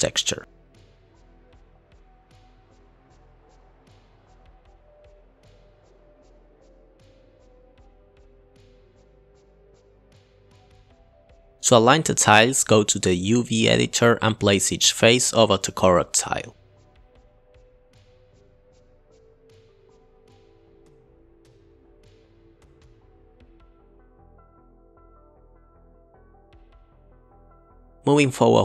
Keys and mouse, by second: 2.6 click, 2.8 drag, 4.2 click, 4.4 click, 5.0 click, 5.2 click, 5.8 click, 5.9 click, 6.1 click, 6.5 click, 6.6 ctrl+t, 6.7 click, 7.0 click, 7.1 click, 8.7 click, 8.9 click, 9.6 click, 10.6 click, 11.7 KP_Divide, 11.8-12.2 middle drag, 12.7 click, 14.2-14.7 drag, 15.9 click, 16.6 g, 17.9 g, 19.5 click, 19.7 g, 20.2 g, 20.9 click, 21.1 g, 21.5 g, 22.4 click, 22.6 g, 22.8 g, 23.9 drag, 24.4 drag, 24.5 click, 26.5 middle click, 27.7 click, 28.2 click, 28.4 click.